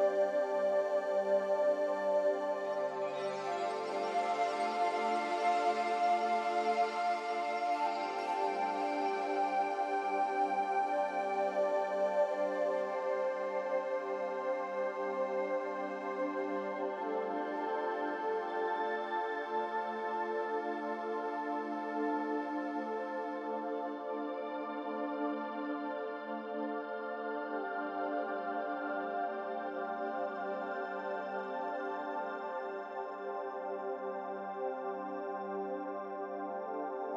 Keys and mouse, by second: 2.2 shift+click, 5.1 r, 7.7 s, 10.8 g, 16.6 g, 19.9-20.7 drag, 21.4 r, 27.9 middle click, 29.1 s, 32.8 Tab, 34.0-34.7 middle drag, 35.7 click.